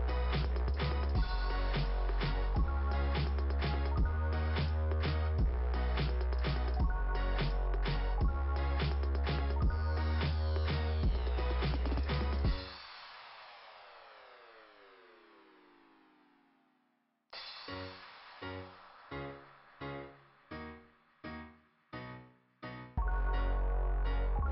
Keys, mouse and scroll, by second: 1.4 scroll down 2, 3.1 scroll down 2, 4.0 click, 6.1 click, 6.3 click, 9.4 click, 9.8 click, 11.2 scroll up 2, 12.8-13.3 scroll up 3, 17.2-17.7 scroll up 2, 18.2 ,, 18.5 right click, 20.0 click, 20.7 right click, 21.4 right click, 22.2 click.